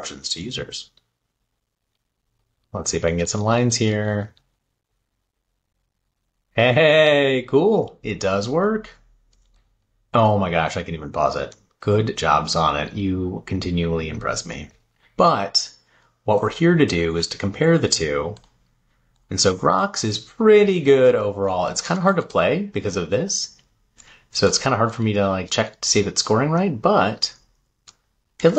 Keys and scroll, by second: 19.8 Left, 21.6 Up.